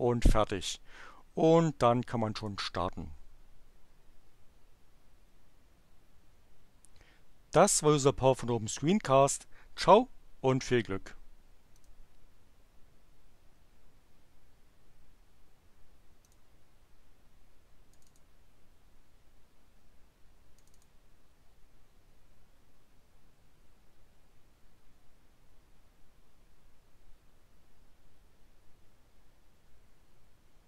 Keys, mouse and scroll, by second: 2.3 click, 11.7 click, 16.2 click, 17.9 click, 20.5 click.